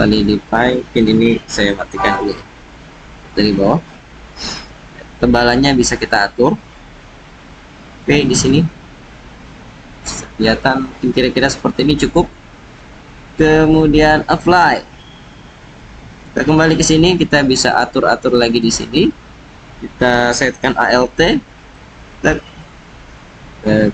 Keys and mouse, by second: 1.6 alt+z, 2.5-3.2 drag, 4.7-7.9 drag, 8.3-12.2 drag, 13.8-14.6 drag, 15.2-15.7 drag, 16.2 Tab, 16.8-17.5 drag, 21.5 alt+click.